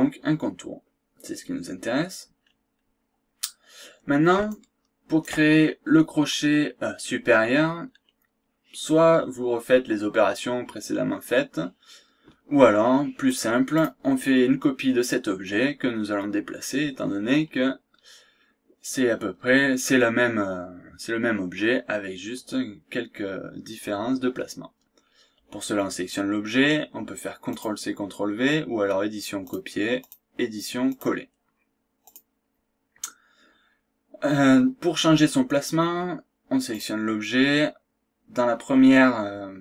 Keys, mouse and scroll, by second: 1.5-1.8 scroll down 2, 2.3 scroll up 2, 4.5 shift+right click, 6.8 scroll down 2, 7.3 scroll up 2, 7.8 scroll down 2, 8.0 scroll up 2, 8.5 scroll down 1, 9.1-9.4 scroll up 2, 9.7-10.1 scroll down 2, 10.1-10.5 scroll up 2, 13.3 click, 13.7 click, 17.1 scroll down 2, 17.4-17.7 scroll up 1, 18.0 scroll down 2, 18.3 scroll up 2, 27.5 click, 29.4 click, 30.0 click, 30.9 click, 32.0 click, 36.7 click.